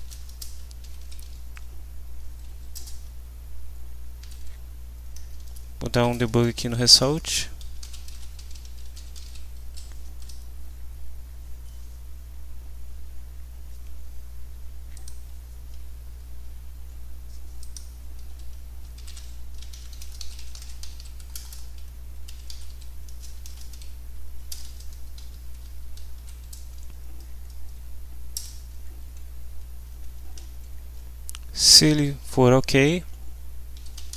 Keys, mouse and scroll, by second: 0.0-1.7 typing, 2.4 Down, 2.7 Return, 4.2 ., 5.3 BackSpace, 7.6-9.7 typing, 10.2 F5, 15.0 click, 16.4 Home, 17.6 click, 18.2 Home, 18.7-26.1 typing, 19.7 shift+End, 19.9 shift+Delete, 28.4 Return, 33.5-34.1 typing.